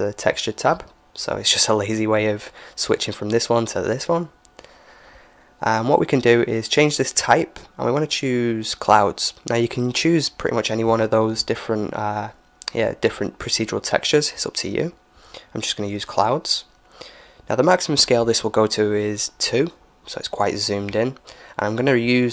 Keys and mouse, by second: 2.3-6.1 drag, 6.9-8.8 drag, 10.4-12.8 middle drag, 16.6-18.5 drag, 21.2-22.3 drag.